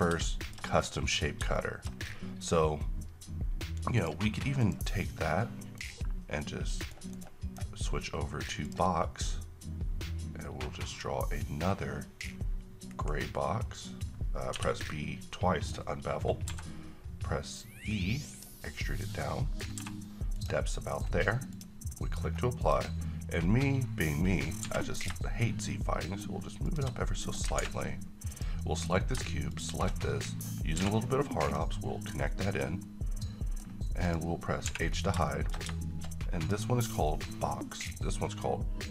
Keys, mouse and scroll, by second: 0.7-1.2 scroll up 1, 1.2 scroll down 1, 1.6 shift+middle click, 2.1-3.9 scroll down 1, 4.0 click, 6.8-8.6 right drag, 8.6 click, 11.0-15.7 drag, 12.9 q, 14.5 b, 16.5 typing, 18.3 click, 18.8-19.7 middle click, 19.7 e, 20.3 click, 20.7 middle click, 21.5 click, 21.9 middle click, 22.2-22.6 scroll up 1, 22.6 click, 24.6 g, 26.6 shift+click, 27.1-27.4 scroll down 1, 27.6 a, 28.3 click, 30.8 q, 31.4 click, 32.1-33.6 middle drag, 34.0 click, 34.7 h, 34.9 scroll down 1, 35.3 middle click, 36.4 click.